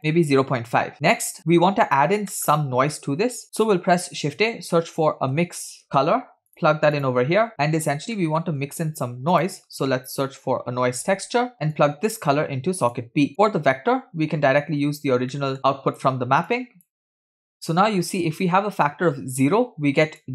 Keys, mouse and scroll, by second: 0.0 click, 0.9 scroll down 2, 1.2 click, 2.4 middle click, 3.4 middle click, 3.4 scroll up 1, 3.7 shift+a, 7.5 click, 8.2 middle click, 8.8 shift+a, 11.8-13.2 drag, 13.3 click, 15.6-16.0 drag, 15.6 middle click, 15.6 scroll down 1, 16.5-17.0 drag, 17.2 click, 17.7 middle click, 18.0-18.9 scroll up 2, 18.9 scroll up 1, 18.9-20.3 drag.